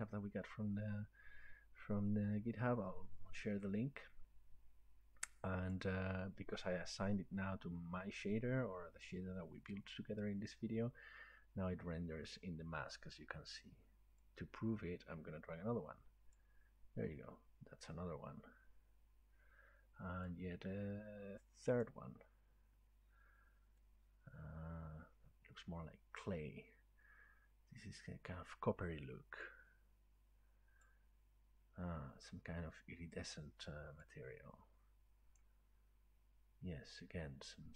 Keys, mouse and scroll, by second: 5.7-10.8 drag, 16.3-20.4 drag, 21.8 click, 26.2 click, 30.8 click, 34.4 click, 35.4 click, 35.9 click.